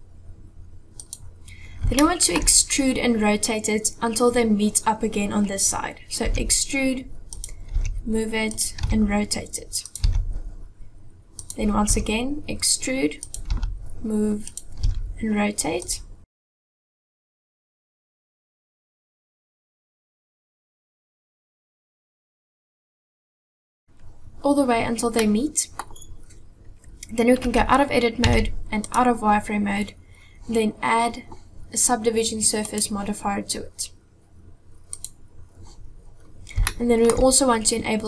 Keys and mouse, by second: 1.9 shift+middle click, 3.9-6.3 middle drag, 6.3 e, 7.8 g, 8.8 r, 10.1 g, 11.9 e, 13.5 g, 14.8 r, 16.3 e, 17.0 g, 17.5 r, 18.4 e, 19.6 g, 20.1 r, 20.5 e, 21.5 g, 21.9 r, 22.4 g, 22.9 e, 25.1 middle click, 27.5 Tab, 28.3 z, 32.5-35.1 drag, 36.7-37.1 shift+middle drag.